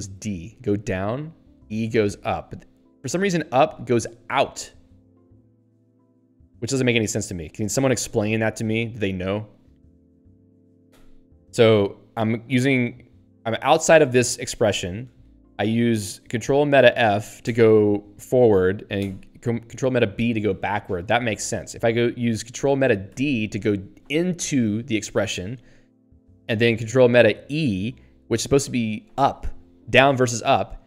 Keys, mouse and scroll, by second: 0.3 ctrl+alt+d, 1.6 ctrl+alt+e, 10.9 ctrl+alt+b, 17.4 ctrl+alt+f, 19.0 ctrl+alt+b, 23.1 ctrl+alt+d.